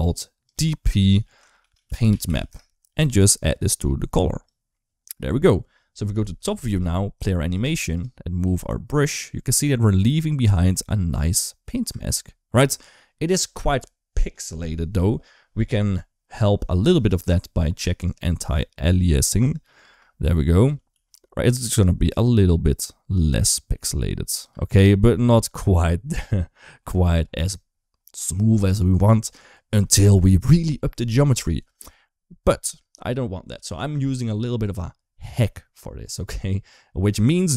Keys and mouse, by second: 0.3-2.3 drag, 3.4 click, 5.9 KP_7, 7.1 shift+middle click, 7.5 space, 8.4 g, 11.7 space, 17.9 click, 19.2 click, 19.7 space, 20.4 drag, 20.8 g, 24.3 space, 34.4 click, 37.1 click.